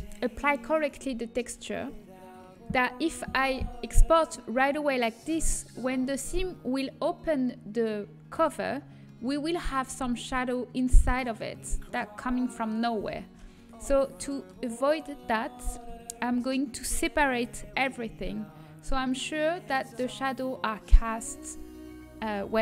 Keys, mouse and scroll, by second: 4.6-7.5 middle drag, 8.7 middle click, 13.7 Tab, 17.2 a, 18.1 l.